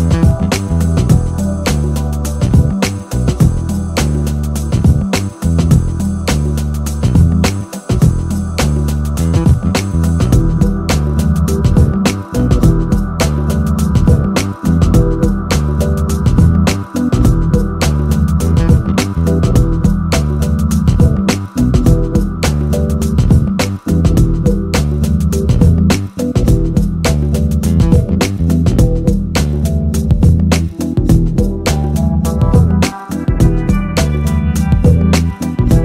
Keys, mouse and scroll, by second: 1.9 middle click, 3.1 middle click, 3.4 click, 4.5 click, 4.9 click, 6.6 click, 7.2 right click, 9.5 right click, 10.0 right click, 10.3 click, 11.3 middle click, 14.1-15.4 right drag, 15.6 click, 19.3-24.5 drag, 26.5 click, 27.8 KP_0, 29.9 click, 30.4 middle click, 32.6 middle click, 35.4 middle click.